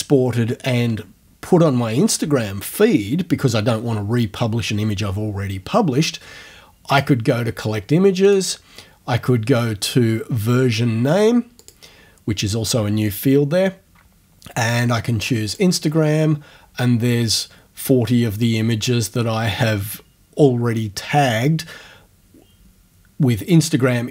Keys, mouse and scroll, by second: 6.9 click, 8.3 click, 11.6 click, 15.5 click.